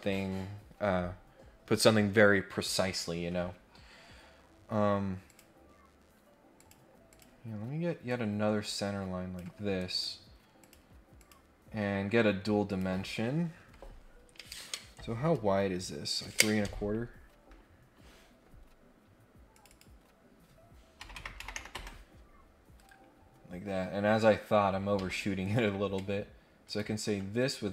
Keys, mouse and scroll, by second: 5.2 click, 6.5 click, 7.1 click, 8.0-9.3 drag, 9.8 right click, 10.6 click, 11.1 click, 12.6 click, 19.5 click, 22.7 Escape, 23.6 scroll up 1, 23.8 scroll down 1, 24.1 scroll up 1, 24.9 Escape, 25.4 click, 26.6 ctrl+click.